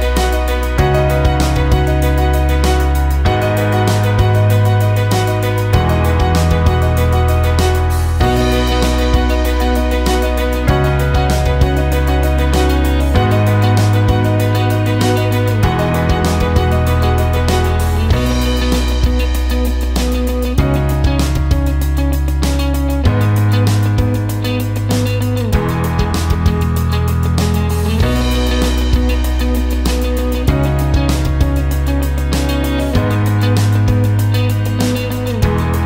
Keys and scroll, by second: 0.0-1.0 typing.